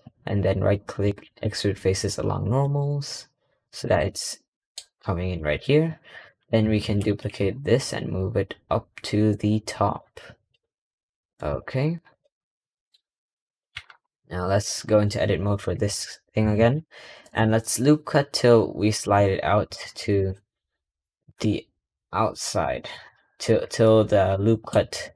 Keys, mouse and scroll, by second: 4.3 scroll down 2, 4.4-5.1 middle drag, 5.1 scroll down 1, 5.3 middle click, 6.1-6.7 middle drag, 10.7 scroll, 11.4 click, 12.0 click, 12.6 middle drag, 12.9-13.3 scroll up 1, 13.3 click, 13.6 Tab, 13.8-14.5 scroll up 3, 14.5-14.9 middle drag, 14.9-15.2 scroll down 2, 15.2-16.4 scroll up 3, 16.4 ctrl+r, 19.7 ctrl+r, 22.9 shift+middle click, 23.4 scroll up 1.